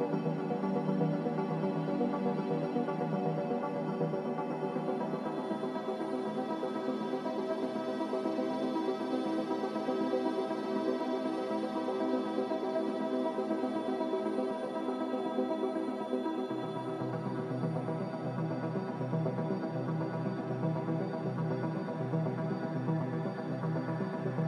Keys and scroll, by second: 0.0-1.0 typing, 11.9 5, 12.1-13.1 Return.